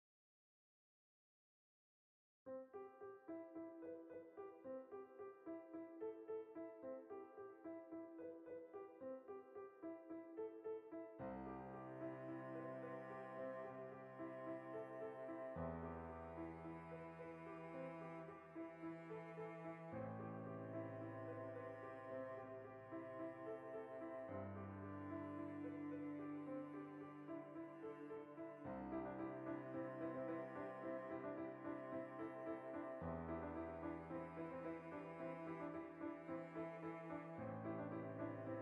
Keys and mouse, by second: 0.6 Tab, 3.8 drag, 4.0-8.1 middle drag, 7.8 Tab, 8.1 right click, 8.3 l, 9.3-14.8 drag, 10.6 Tab, 11.3 Tab, 14.8 Tab, 15.1-21.2 middle drag, 16.7 alt+q, 17.8 alt+q, 21.2 alt+q, 21.9 shift+middle click, 22.6 b, 22.8 shift+middle click, 23.2 click, 23.9 ctrl+z, 24.5 click.